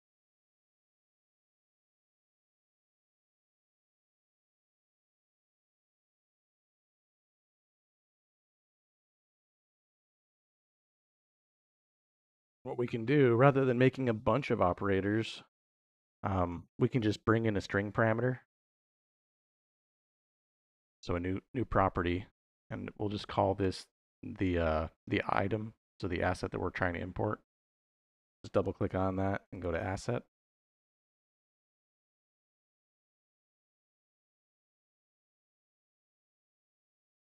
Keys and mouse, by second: 1.9-3.2 drag, 3.5 click, 4.3-5.5 drag, 6.0 middle click, 6.9-8.1 drag, 8.4 middle click, 19.0 click, 27.4-30.6 drag, 31.3-37.2 drag, 34.4 s.